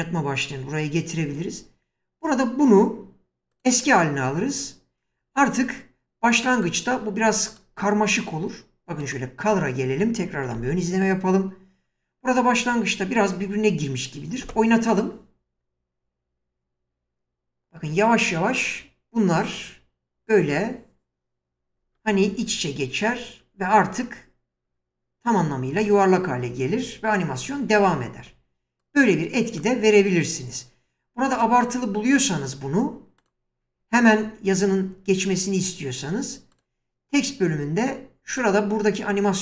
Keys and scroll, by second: 10.6 ctrl+f, 14.4 space, 27.7 space.